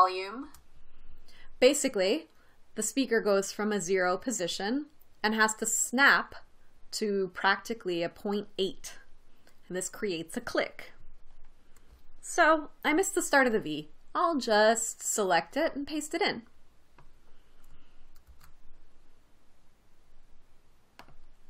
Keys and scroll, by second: 0.8 space, 18.7 super+x.